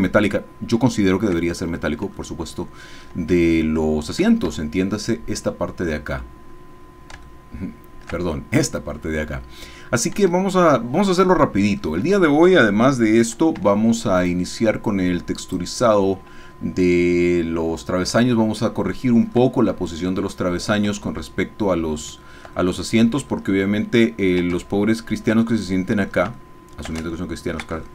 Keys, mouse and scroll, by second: 0.5 shift+right click, 1.4 shift+middle click, 2.4 shift+middle click, 4.5 Tab, 7.3 shift+middle click, 10.5-11.9 shift+middle drag, 13.5 b, 14.3-15.7 drag, 18.3-19.5 shift+middle drag, 20.1 shift+middle click, 22.2 shift+click, 22.7 shift+middle click, 23.0 ctrl+click, 23.7 ctrl+click, 24.8 ctrl+shift+click, 25.6 shift+middle click, 26.4 shift+middle click, 27.1 ctrl+shift+middle click.